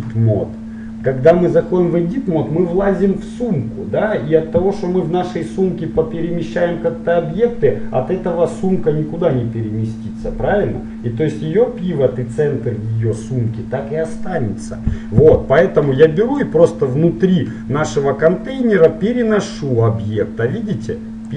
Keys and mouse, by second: 0.0 click, 16.5-18.5 drag.